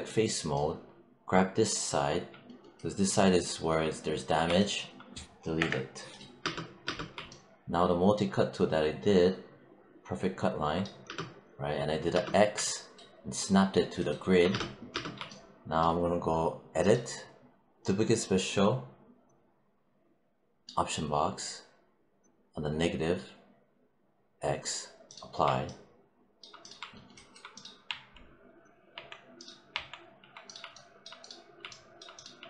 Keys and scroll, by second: 5.5 BackSpace, 6.3 space, 10.9 space, 14.4 space, 27.7 `.